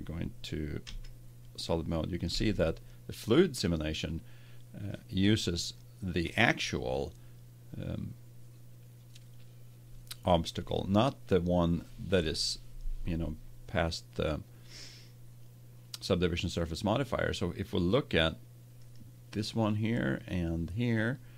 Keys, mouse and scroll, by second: 1.0 z, 1.6-4.1 middle drag, 5.3-7.0 middle drag, 18.7-20.4 right drag, 20.1 click, 20.7-21.3 drag.